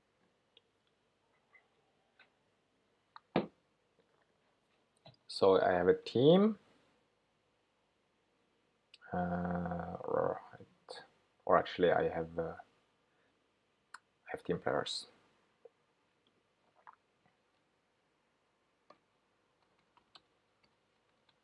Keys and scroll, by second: 18.4 shift+super+9.